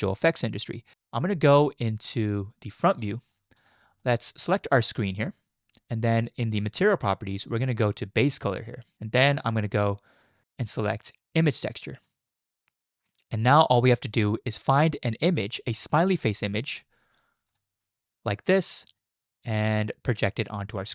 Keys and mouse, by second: 3.7 shift+drag, 10.1-12.1 drag, 17.5 click, 19.6 z.